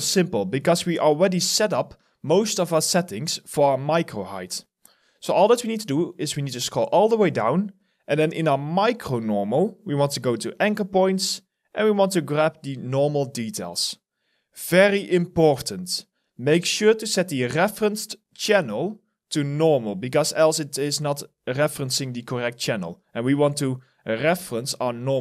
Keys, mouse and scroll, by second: 5.2-6.9 scroll down 1, 13.8-15.8 scroll down 1.